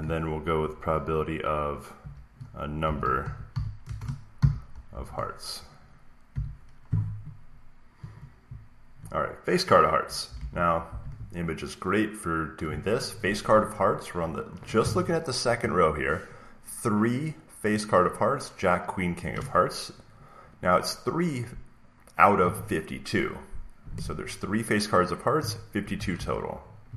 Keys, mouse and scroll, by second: 0.5 p, 1.9-4.8 typing, 6.0-6.7 typing, 7.9 Right, 10.2 alt+Up, 10.3 alt+Tab, 10.8 alt+Tab, 26.1 alt+Tab.